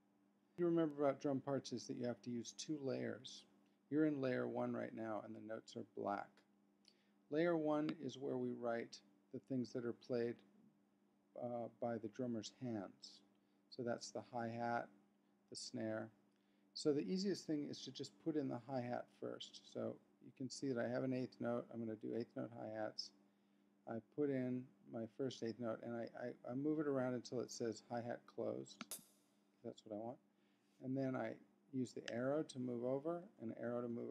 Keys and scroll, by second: 32.1 Right, 32.8 Up.